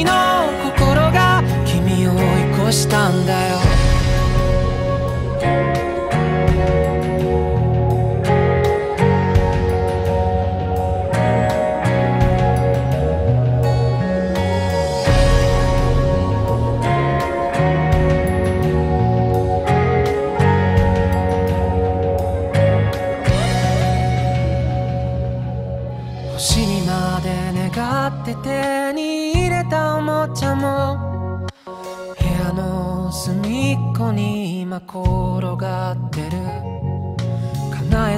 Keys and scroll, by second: 3.7 ctrl+z, 3.9 ctrl+z, 8.8 ctrl+z, 16.8 ctrl+z, 17.3 ctrl+z, 18.4 ctrl+z, 18.6 ctrl+z, 22.3 ctrl+z, 25.5 ctrl+z, 30.3 ctrl+z, 30.5 ctrl+z, 33.0 ctrl+z, 34.1 ctrl+shift+z, 34.6 ctrl+z, 35.6 ctrl+z, 37.3 ctrl+z.